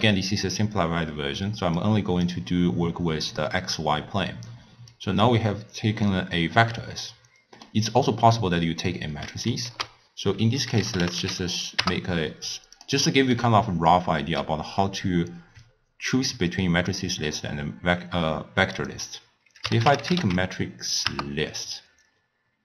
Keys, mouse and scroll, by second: 1.8 click, 4.9-6.9 drag, 6.9-9.6 middle drag, 9.6 ctrl+a, 13.1-14.0 middle drag, 14.0 click, 18.8-22.6 drag.